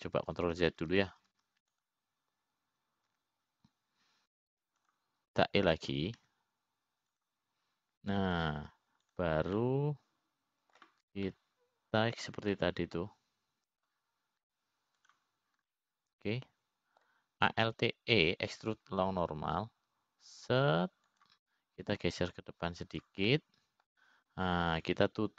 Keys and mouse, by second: 2.4 ctrl+z, 5.0 ctrl+z, 7.4 click, 8.8 e, 10.9 click, 11.6 click, 12.1-13.3 middle drag, 13.9 middle click, 15.2-16.6 middle drag, 18.3-19.7 middle drag, 20.4 alt+e, 24.8 click.